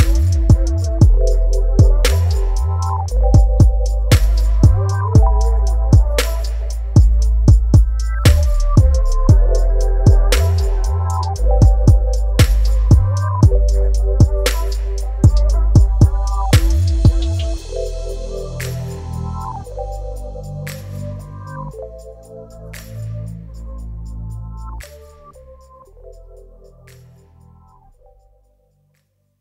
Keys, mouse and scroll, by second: 0.5 Tab, 1.0-2.1 drag, 2.1 Tab, 2.5-4.2 middle drag, 4.2 alt+right click, 4.7-5.2 middle drag, 5.2 s, 5.9 Tab, 6.3 s, 7.5 Tab, 7.6-8.0 scroll down 3, 8.0 Tab, 8.1-14.0 drag, 14.0 shift+right click, 14.4 w, 15.1 scroll down 2, 15.2 middle click, 15.9 w, 16.9 a, 17.1 a, 18.7 middle click, 19.0 scroll up 2, 19.4 s, 20.6 g, 21.8 a, 21.9 scroll down 1, 22.1-22.5 middle drag, 22.5 Tab, 22.9 KP_Divide, 23.3 scroll down 3, 23.6 shift+middle click, 24.5 right click, 26.3 scroll down 1, 26.5-27.8 shift+middle drag, 27.8 KP_Divide, 28.0 e.